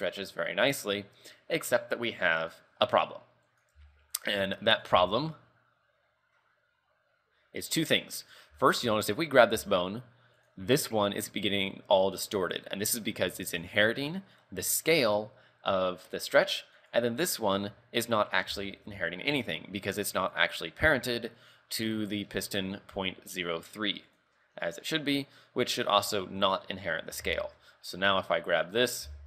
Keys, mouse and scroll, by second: 3.7 right click, 3.8 g, 4.9 right click, 5.0 g, 8.7 shift+middle click, 9.0 scroll up 3, 9.6 g, 12.4 right click, 13.6 click, 14.2 scroll down 3, 14.9 click, 16.9 right click, 18.4 scroll down 4, 18.7 shift+middle click, 19.1-19.4 scroll up 3, 19.4 Tab, 20.5 click, 26.5 click, 26.9 scroll down 4, 27.1 Tab, 27.5 shift+middle click, 28.3 right click, 28.7 right click, 29.1 g.